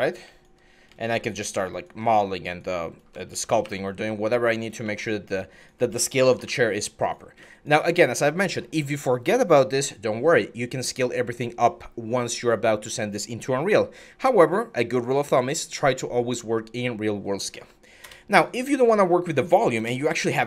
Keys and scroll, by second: 3.1 ctrl+e, 3.4 w, 5.1 q, 6.0 ctrl+e, 6.3 w, 17.8 BackSpace, 19.6 BackSpace, 20.1 alt+Tab.